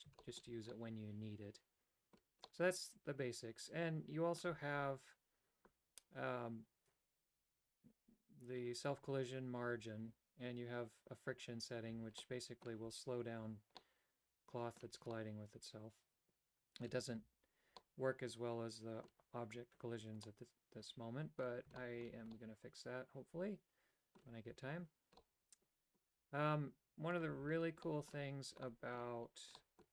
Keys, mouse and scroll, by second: 0.4 shift+middle click, 0.8-2.3 middle drag, 2.5-4.4 middle drag, 12.3 middle click, 13.8-15.0 middle drag, 15.3-17.0 middle drag, 17.9-19.2 middle drag, 20.3-21.5 middle drag, 21.8 shift+middle click, 22.3-24.3 middle drag, 25.4 middle click, 27.2 click, 27.9 middle click, 28.7 middle click, 29.4 Tab, 29.6 middle click.